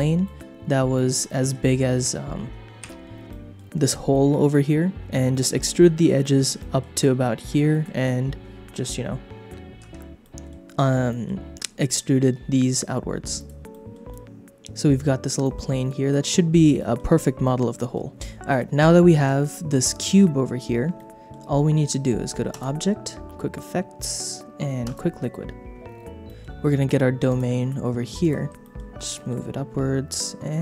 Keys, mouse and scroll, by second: 0.2 shift+middle click, 0.9 shift+middle click, 1.2 middle click, 2.8 h, 3.3 middle click, 5.1 shift+middle click, 5.6 middle click, 6.2 shift+middle click, 6.5 middle click, 7.7 middle click, 9.9 ctrl+z, 10.2 middle click, 11.1 middle click, 13.3 click, 13.7 shift+middle click, 14.1-15.2 middle drag, 15.4 shift+middle click, 16.2 middle click, 16.4 click, 16.8 shift+middle click, 17.4 middle click, 19.8 middle click, 20.9 middle click, 22.5-25.3 drag, 26.2 shift+middle click, 27.3 click, 28.2 click, 28.6 shift+middle click, 29.1 g, 29.2 middle click.